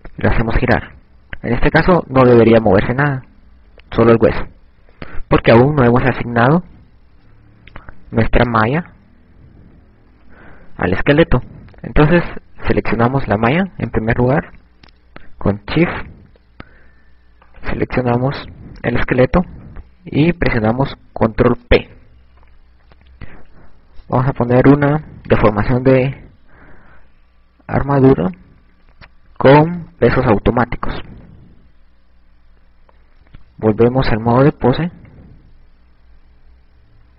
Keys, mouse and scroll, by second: 0.6 click, 1.4 click, 7.0 ctrl+z, 9.9 ctrl+Tab, 14.0 right click, 17.9 shift+right click, 22.2 ctrl+p, 35.2 click.